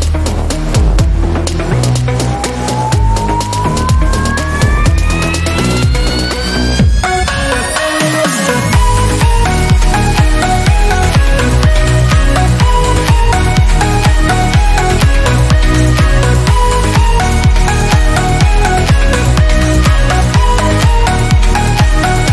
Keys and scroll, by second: 6.5 s, 7.2 a, 9.6 shift+w, 10.6-12.8 typing, 15.6 F12.